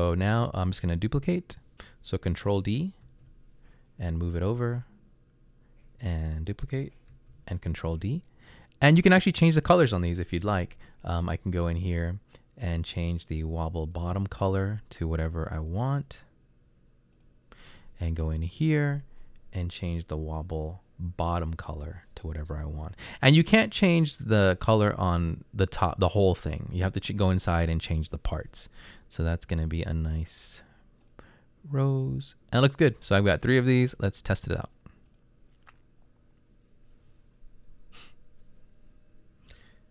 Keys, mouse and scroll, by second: 1.1-1.9 typing, 3.1 ctrl+d, 39.7 Right.